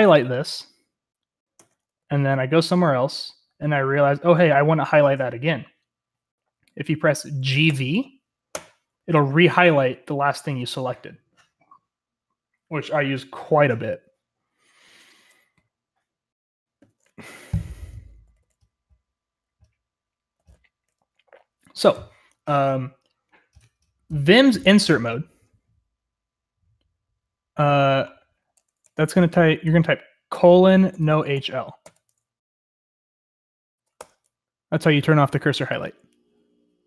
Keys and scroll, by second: 0.0-0.5 typing, 1.5 Escape, 2.0-5.5 typing, 7.7-8.5 typing, 18.2 typing, 20.4-21.0 typing, 28.8 Escape, 30.3-32.3 typing, 34.0 Return.